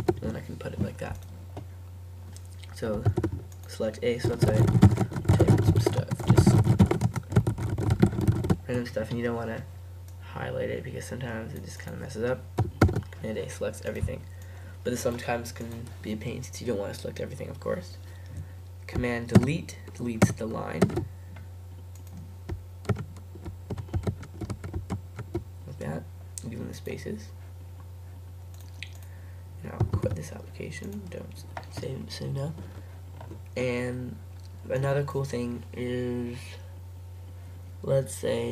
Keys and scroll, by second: 0.0 super+v, 3.1 super+a, 4.9-7.9 typing, 5.1 Return, 9.0 typing, 10.8 typing, 12.9 super+a, 29.9 super+q.